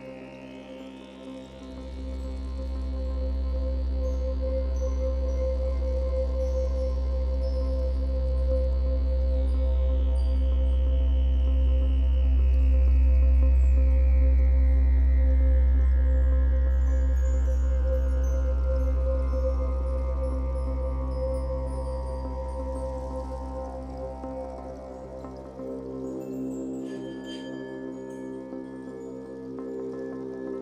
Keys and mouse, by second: 0.4 click, 2.6 g, 2.8 y, 3.7 click, 6.7-8.7 drag, 8.8-9.9 drag, 9.9 0, 11.0 alt+shift+click, 11.4 click, 12.0 click, 12.7 ctrl+alt+click, 13.5 typing, 14.3 click, 14.8 typing, 15.4 click, 15.8 alt+click, 17.0 typing, 17.8 click, 18.9 typing, 19.9 click, 20.4 typing, 22.5 click, 23.9 typing, 25.0-27.3 drag, 25.8 typing, 28.2-30.6 alt+drag.